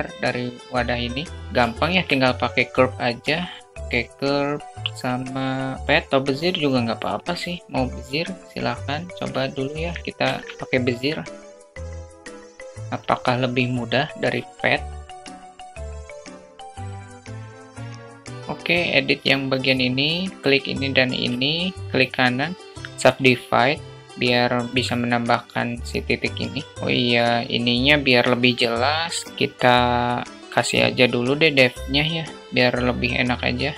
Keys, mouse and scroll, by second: 2.8 shift+a, 10.4 alt+middle click, 11.1 alt+shift+middle click, 11.5 click, 12.1 click, 12.2 s, 12.7-14.0 drag, 15.2 g, 15.5 click, 15.7 middle click, 15.9 click, 16.4 alt+middle click, 16.6 click, 16.9 click, 17.2 click, 17.3 click, 17.6 alt+middle click, 17.7 click, 17.8 ctrl+z, 18.2 Tab, 18.3 click, 18.4 alt+middle click, 19.2 click, 21.8 shift+click, 23.0-24.2 right drag, 24.7-26.1 drag, 28.2 Tab, 30.4 click, 33.6-33.7 drag.